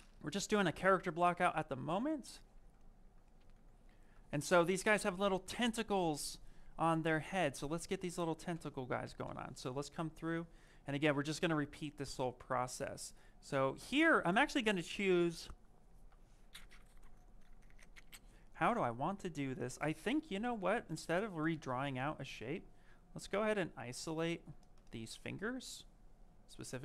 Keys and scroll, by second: 3.8 s, 8.9 i, 23.0 ctrl+z.